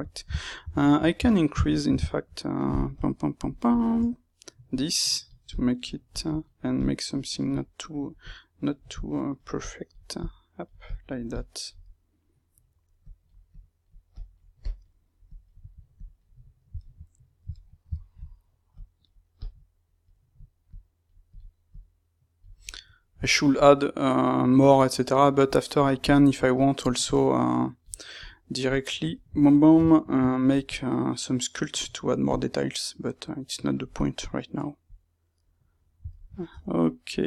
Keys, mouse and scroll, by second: 3.4 click, 4.6 click, 5.4 click, 6.1 click, 7.4 middle click, 8.1 click, 8.9 click, 9.6 click, 10.8 click, 11.2 click, 11.7-12.9 middle drag, 12.9 click, 13.4 click, 14.5-15.9 drag, 16.3-18.7 middle drag, 18.7 click, 19.3 click, 20.6 click, 21.6 click, 22.5-26.9 middle drag, 26.9 click, 28.1 click, 28.7-30.6 middle drag, 30.6 click, 32.2 click, 34.0-37.2 middle drag, 36.5 Tab.